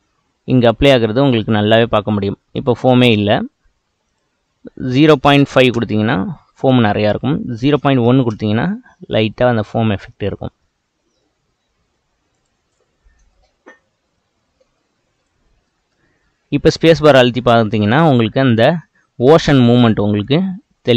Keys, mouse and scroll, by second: 9.3-10.7 middle drag, 10.7-11.7 scroll up 1, 11.7-12.2 scroll up 1, 12.4 click, 13.3-15.0 middle drag, 15.0-15.7 scroll up 3, 15.7-16.2 middle drag, 16.2 space.